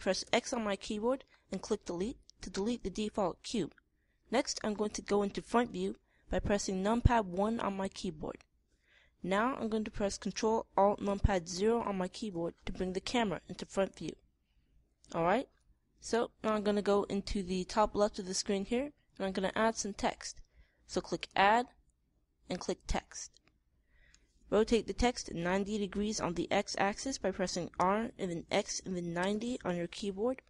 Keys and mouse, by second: 0.7 x, 7.8 KP_1, 12.0 ctrl+alt+KP_0, 28.3 r.